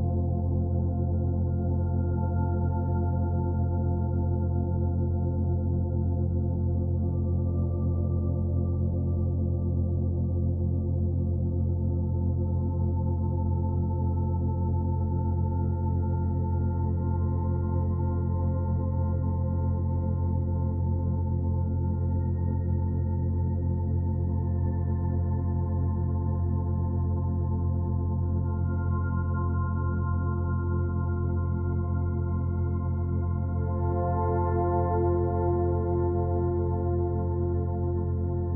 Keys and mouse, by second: 0.6-1.4 drag, 1.7 click, 2.6 ctrl+c, 3.0 Escape, 6.1-7.0 drag, 7.1-8.5 drag, 10.6-11.5 drag, 11.8-13.1 drag, 13.4-13.9 drag, 15.6 click, 16.3 click, 17.6-18.1 typing, 18.3 Return, 19.5 click, 20.5 Delete, 21.5 click, 22.0 click, 22.3 click, 22.4-23.6 typing, 24.7 click, 28.8 ctrl+v, 28.9-29.6 typing, 30.2 ctrl+alt+click, 33.3-33.9 drag, 35.5 click, 36.3-37.1 ctrl+alt+drag, 37.6-38.5 alt+drag.